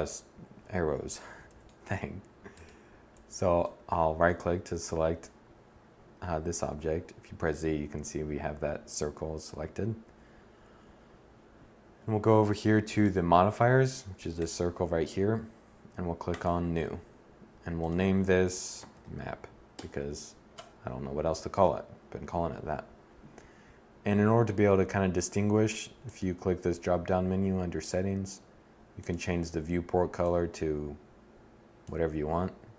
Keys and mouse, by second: 6.0 z, 9.4 z.